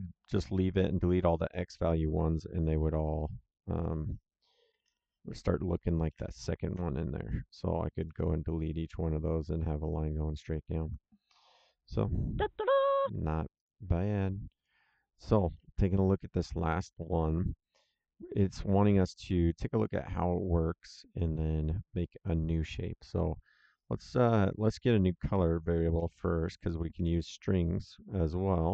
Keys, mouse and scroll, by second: 1.1 click, 3.7 click, 4.7 End, 4.9 shift+Home, 6.0 Delete, 8.0 click, 12.3 click, 13.5 click, 20.8 click, 23.7 click, 25.9 ctrl+c, 26.9 ctrl+v.